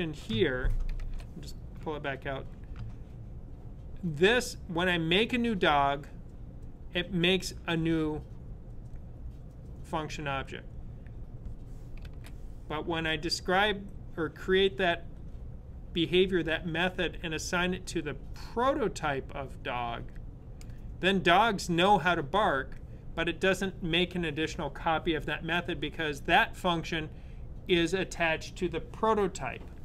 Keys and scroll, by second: 0.7 super+/, 11.9 super+/.